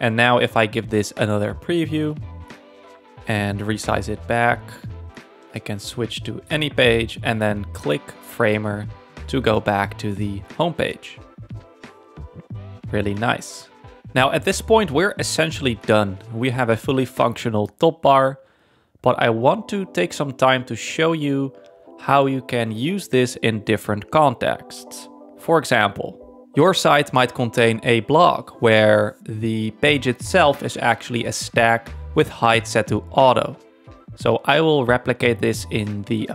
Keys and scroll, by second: 22.9 super+1, 33.8 1, 34.2 Return.